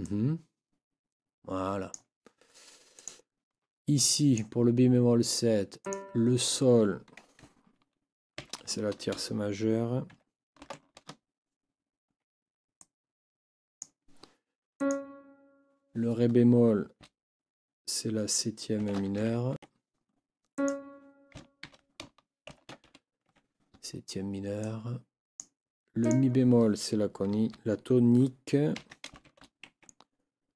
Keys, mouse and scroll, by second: 0.0-2.1 drag, 3.9 click, 4.2 click, 5.8 click, 8.4 ctrl+t, 10.6 shift+m, 12.1 Escape, 19.2 ctrl+m, 19.5 ctrl+Escape, 20.5 click, 21.6 ctrl+t, 22.8 shift+m, 23.2 shift+Escape, 24.6-25.6 drag, 26.0 click, 28.8 ctrl+t, 29.6 ctrl+shift+Escape.